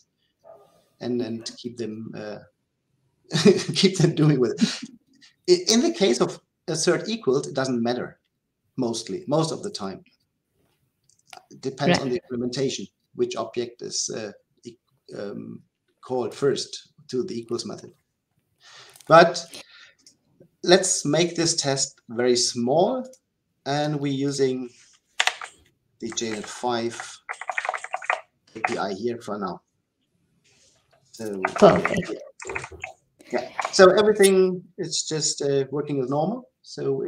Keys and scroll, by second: 28.4 Delete.